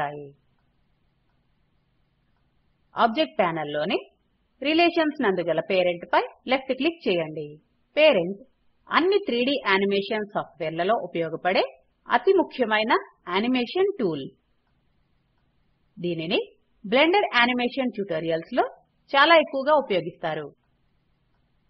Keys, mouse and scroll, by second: 0.3 click.